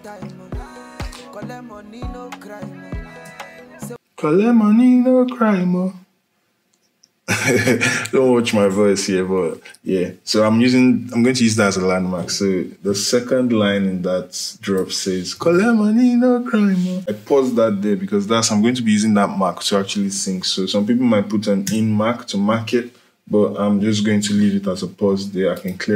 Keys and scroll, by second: 3.8 space, 16.9 space, 21.4 i.